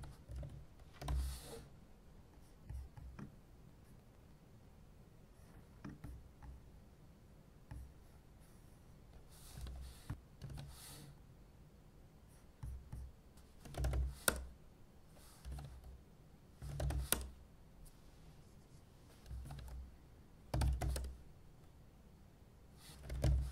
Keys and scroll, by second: 0.0-1.6 typing, 9.6 super+w, 10.5 super+p, 13.4-14.4 typing, 15.5 super+p, 16.4-17.4 typing, 19.1 typing, 19.4 super+p, 20.3-21.3 typing, 22.8-23.5 typing.